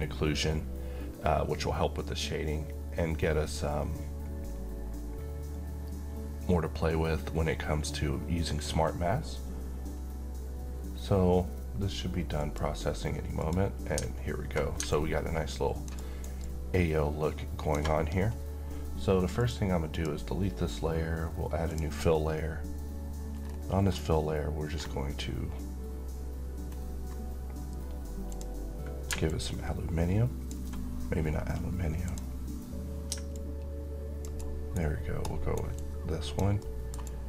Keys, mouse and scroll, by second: 12.1 click, 14.6-16.0 alt+click, 15.7 alt+right click, 16.1-17.7 alt+drag, 19.1 click, 23.2-23.6 scroll down 1, 23.6-25.0 scroll up 1, 25.0 scroll down 1, 26.4-26.8 scroll up 1, 28.0-34.1 drag, 34.1-34.7 alt+right drag, 35.4 alt+click, 36.3 alt+middle click, 36.7 alt+right click, 36.7 alt+right click.